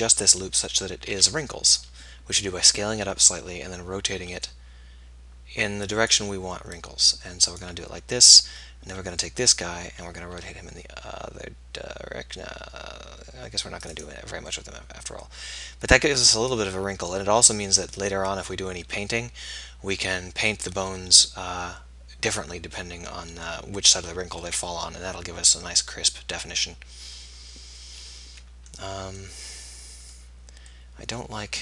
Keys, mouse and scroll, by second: 1.2 s, 4.3 r, 10.4 r, 14.6-16.6 middle drag, 18.6 middle click, 21.0 middle click, 21.8-23.1 middle drag, 25.6 middle click, 27.2 middle click, 29.5 middle click, 30.9 middle click.